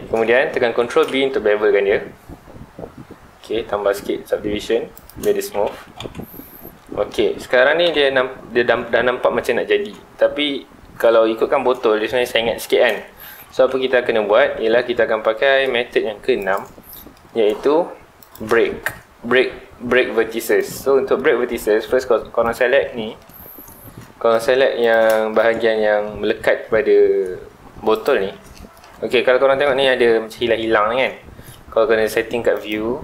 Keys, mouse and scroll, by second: 0.8 ctrl+b, 5.1 shift+click, 5.4 alt+a, 5.6 Tab, 6.0 alt+a, 6.3-7.8 middle drag, 7.8 KP_1, 13.2 Tab, 13.5 middle click, 14.2-14.5 scroll up 1, 14.5 2, 16.4 alt+click, 16.8-18.2 middle drag, 18.2 alt+shift+click, 18.7-20.4 middle drag, 20.4 alt+shift+click, 20.8 middle click, 21.7 alt+a, 22.4 alt+click, 22.9-24.8 middle drag, 24.8 alt+shift+click, 25.1 shift+middle click, 25.5 ctrl+z, 25.7-26.1 scroll up 2, 26.1 scroll down 2, 26.4 middle click, 26.9-27.2 scroll up 2, 27.9 alt+shift+click, 28.5-32.0 middle drag, 32.5 click.